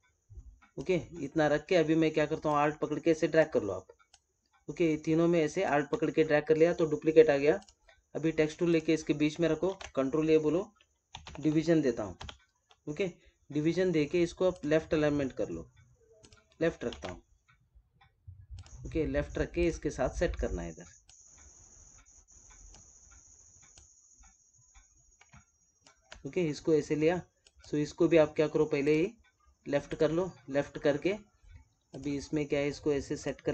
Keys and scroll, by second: 9.6 ctrl+a, 16.8 ctrl+a.